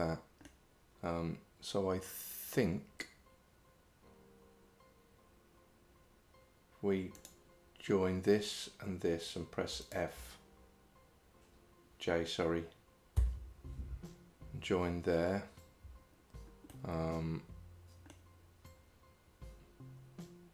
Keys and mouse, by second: 7.3 click, 9.9 shift+click, 13.2 j, 16.8-18.2 middle drag.